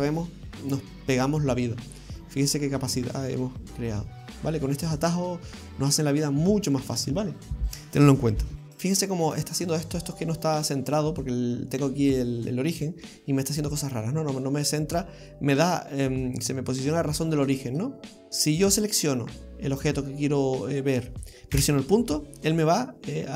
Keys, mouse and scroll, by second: 0.4 middle click, 8.5 scroll down 8, 8.5 a, 8.5 g, 8.6 shift+middle click, 8.7 shift+middle click, 8.7 scroll down 1, 12.8 scroll down 3, 13.1 middle click, 17.8 scroll up 1, 18.3 click, 18.3 middle click, 18.8 right click, 21.5 KP_Decimal, 22.4-23.3 scroll down 6.